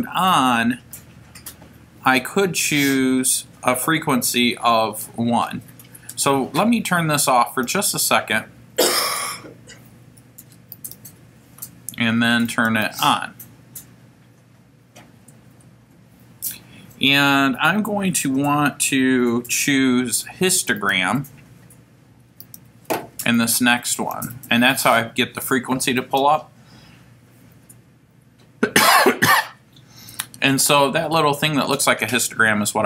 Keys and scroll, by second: 7.5 Right, 9.0 Return, 10.8 Left, 12.9 Return, 20.8 Right, 22.4 Down, 23.4 Right, 26.0 Return.